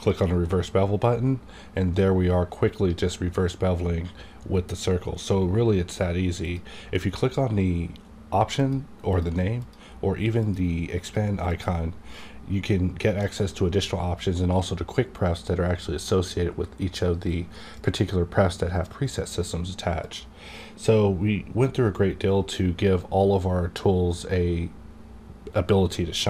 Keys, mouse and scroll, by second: 0.0 click, 6.4 click, 9.5 click, 20.0 click.